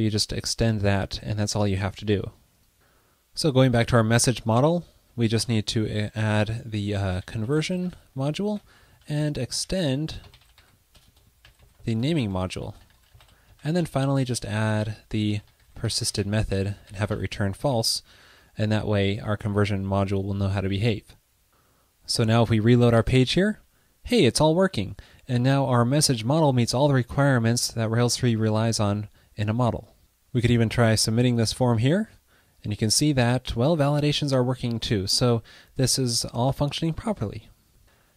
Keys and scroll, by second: 5.3 shift+d, 8.5 shift+d, 9.4 alt+Right, 12.3 Right, 12.3 alt+shift+Left, 14.1 super+Right.